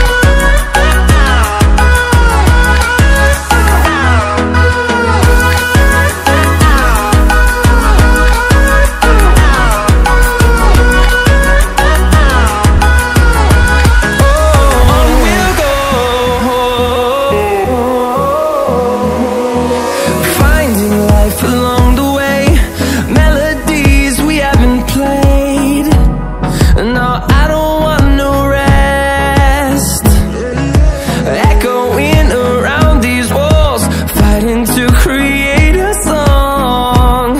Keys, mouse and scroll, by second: 1.6-1.9 ctrl+alt+scroll down 2, 2.1 ctrl+alt+scroll up 1, 2.6-18.3 drag, 21.5 click, 29.2 click, 32.6-37.3 drag.